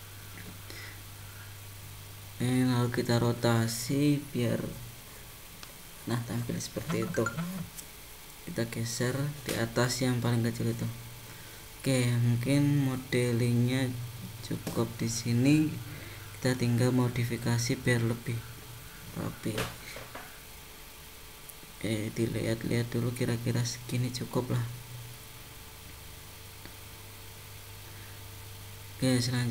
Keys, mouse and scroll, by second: 1.2 g, 3.5 r, 7.2 g, 10.5 middle click, 14.8 middle click, 16.7 middle click, 20.6 middle click, 25.5 scroll down 1, 26.1 shift+middle click, 29.2 click.